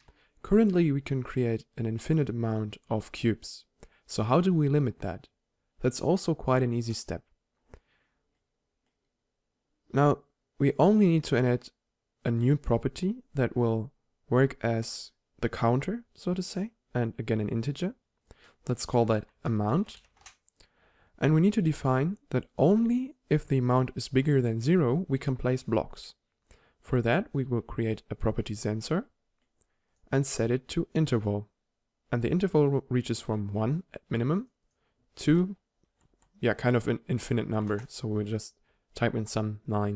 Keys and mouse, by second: 6.8-8.8 drag, 11.4-12.2 drag, 14.1-14.8 drag, 16.7-18.1 drag, 24.3-29.8 drag, 31.7 click, 33.9 click, 36.0 9, 36.5 click, 36.5-39.9 middle drag, 36.5 right click, 36.6 9, 37.0-39.9 drag, 37.0-39.9 right drag, 37.4 9.